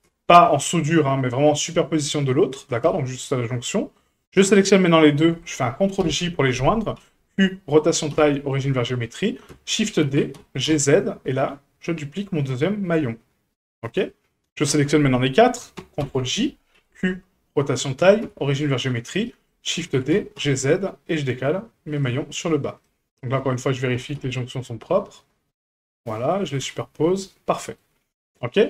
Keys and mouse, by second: 2.8 a, 4.3-5.0 shift+drag, 5.0 shift+middle drag, 6.1 ctrl+j, 6.9 q, 8.1 q, 10.0 shift+d, 14.6 shift+click, 16.0 ctrl+j, 16.7 q, 18.2 q, 19.2 shift+middle drag, 19.9 shift+d, 22.8 middle click, 23.9 g, 26.6 a, 27.5 middle drag.